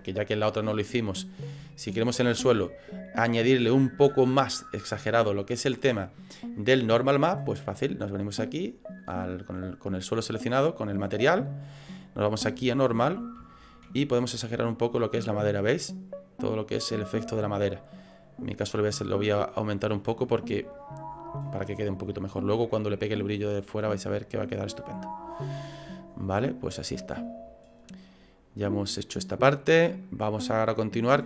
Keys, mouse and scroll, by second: 0.8 middle click, 1.6 ctrl+middle click, 2.4 shift+middle click, 8.7 click.